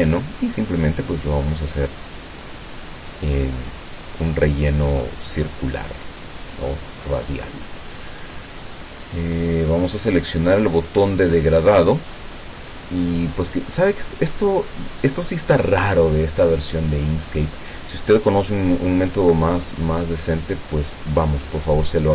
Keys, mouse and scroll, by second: 1.1 click, 10.9 click, 19.0 click.